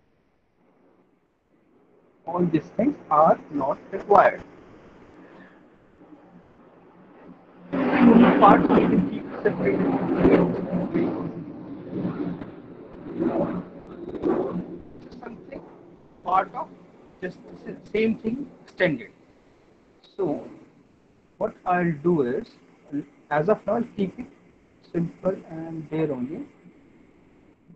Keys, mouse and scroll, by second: 0.2 alt+middle click, 1.0 middle click, 1.2 alt+middle click, 2.7 click, 3.3 Delete, 4.3 middle click, 5.4 middle click, 5.6 alt+middle click, 7.4 alt+middle click, 10.3 middle click, 10.7 middle click, 12.4 alt+middle click, 13.4 middle click, 14.0 alt+middle click, 14.2 middle click, 16.7 alt+middle click, 17.4 click, 19.6 alt+middle click, 20.2 middle click, 20.6 middle click, 21.3 alt+middle click, 21.7 middle click, 22.9 alt+middle click, 23.3 middle click, 23.5 middle click, 23.6 alt+middle click, 26.3 alt+middle click, 26.6 middle click.